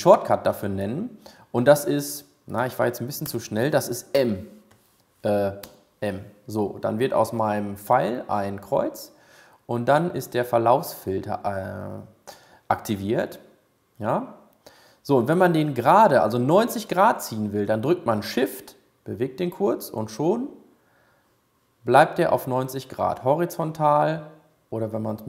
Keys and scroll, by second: 5.6 m, 18.6 shift+m.